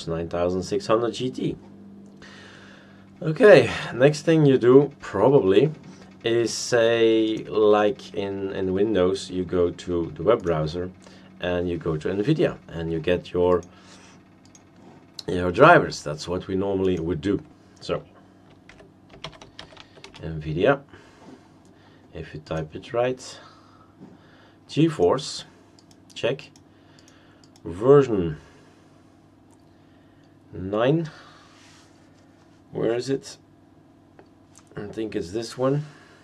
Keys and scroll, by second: 18.4-20.3 typing.